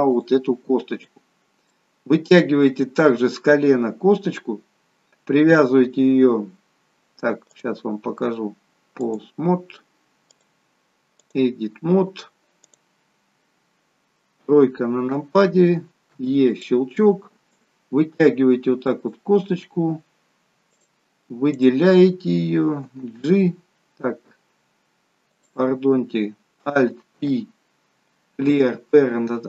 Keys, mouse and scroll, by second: 1.7 middle click, 7.5 click, 10.4 click, 14.4 KP_3, 16.2 e, 19.1 click, 20.7 click, 21.6 click, 22.9 g, 27.2 alt+p.